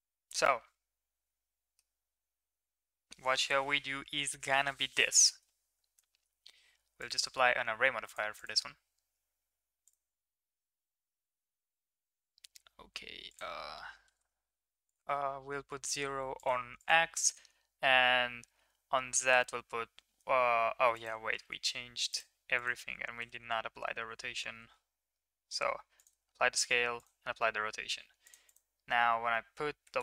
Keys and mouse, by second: 6.9 click, 8.0 click, 8.4-9.8 drag, 13.2 click, 14.8-16.3 drag, 16.8-19.3 drag, 21.0-22.0 drag, 22.5 click, 24.4 ctrl+a, 26.3 ctrl+a, 28.2 click, 28.4-29.9 drag.